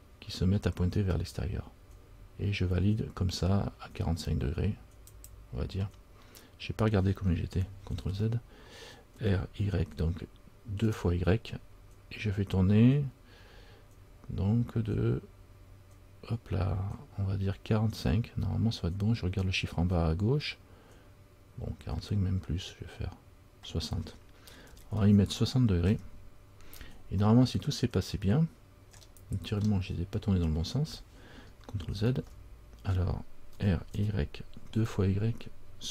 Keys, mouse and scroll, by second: 8.2 ctrl+z, 9.3 r, 29.5-30.5 scroll up 4, 32.3 ctrl+z, 33.7 r.